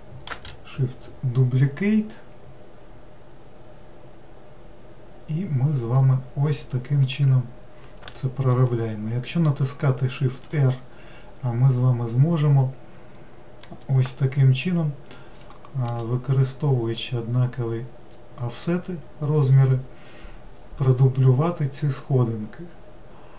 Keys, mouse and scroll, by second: 0.3 shift+d, 8.5 shift+r, 10.5 shift+r, 13.6 shift+r.